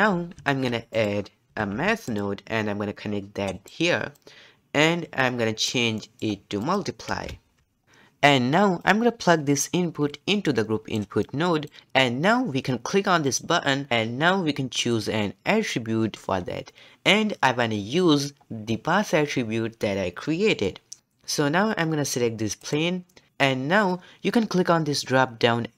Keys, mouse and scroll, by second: 0.3 shift+a, 4.1-6.0 drag, 6.0-6.6 middle drag, 6.6-7.8 drag, 8.8-11.3 drag, 13.2-16.1 drag, 22.6 click.